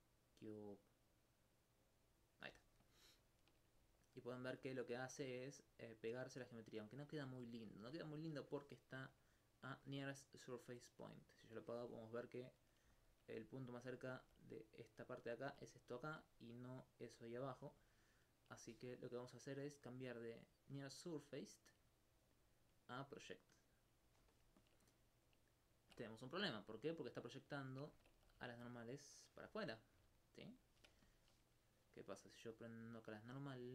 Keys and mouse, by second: 2.9 alt+click, 3.1 alt+click, 7.3 alt+click, 11.4 click, 12.1 alt+click, 12.6 alt+click, 12.9 alt+click, 14.1 alt+click, 15.1 alt+click, 16.2 alt+click, 16.7 alt+click, 17.8 alt+click, 19.6-20.7 drag, 26.8 alt+click, 27.6 alt+click, 28.5 alt+click, 29.5 alt+click, 31.1 alt+click, 31.5 middle click.